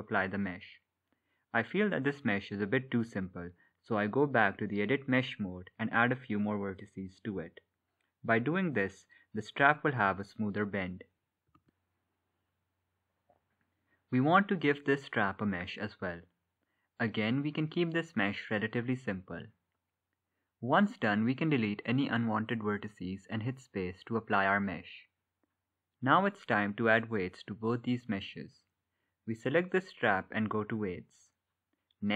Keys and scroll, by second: 24.3 ctrl+z.